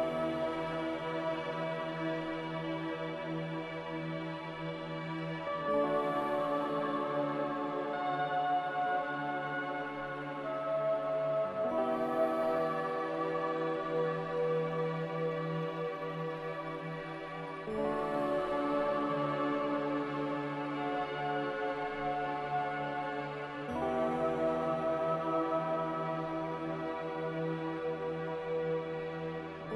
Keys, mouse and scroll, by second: 3.9 Delete, 7.0 ctrl+z, 14.3 z.